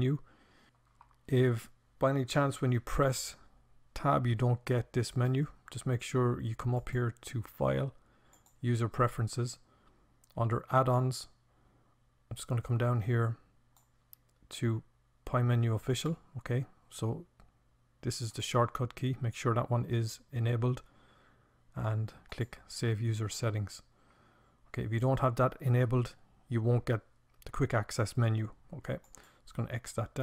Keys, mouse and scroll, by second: 1.5 Tab, 5.6-12.6 drag.